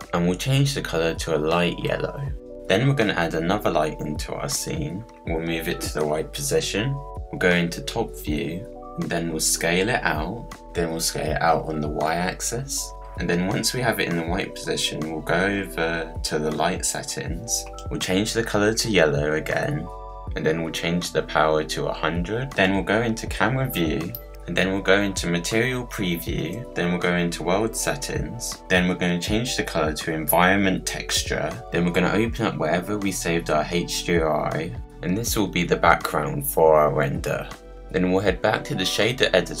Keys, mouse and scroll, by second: 2.4 click, 2.9-5.1 middle drag, 5.1 shift+a, 5.2 scroll up 1, 5.4 click, 5.6 middle click, 5.8 click, 6.0 middle click, 6.2 click, 6.4 middle click, 6.7 click, 7.0-8.3 middle drag, 8.3 click, 8.7-9.1 scroll up 3, 9.1-9.5 scroll down 1, 9.5 s, 10.9 s, 13.4 click, 14.4 middle click, 15.0-15.7 scroll down 1, 15.7 middle click, 16.7-17.5 scroll down 1, 17.5-17.8 scroll up 1, 18.2 click, 22.5 0, 22.8 click, 24.0 click, 26.5 click, 31.0-34.5 drag, 34.8 middle click, 35.1-35.7 scroll down 7, 35.7-36.7 middle drag, 37.1 middle click, 37.3-39.6 middle drag.